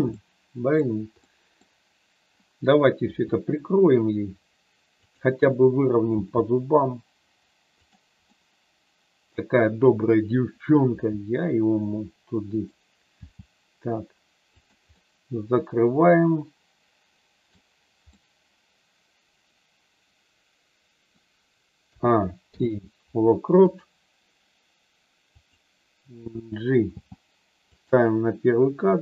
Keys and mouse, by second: 0.2 middle click, 1.3 middle click, 3.1 r, 6.2 g, 8.3 middle click, 10.9 r, 13.2 g, 14.5 click, 14.9-17.4 middle drag, 18.2-21.1 middle drag, 22.0 a, 22.4 i, 25.3 click, 26.8 g, 27.7 click, 28.9-29.0 drag.